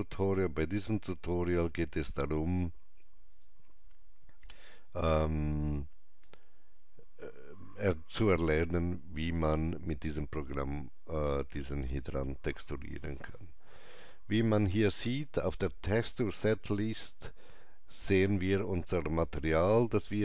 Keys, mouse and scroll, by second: 3.3 click, 3.3 scroll down 1, 4.6 click, 4.8-8.8 drag.